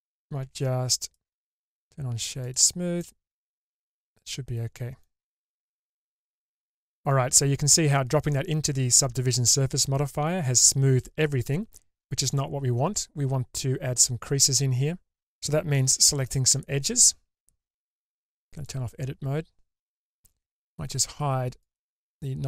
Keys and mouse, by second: 0.6 Tab, 1.1-2.7 right drag, 3.1-5.2 middle drag, 16.0 Tab, 18.7 click, 21.8 click.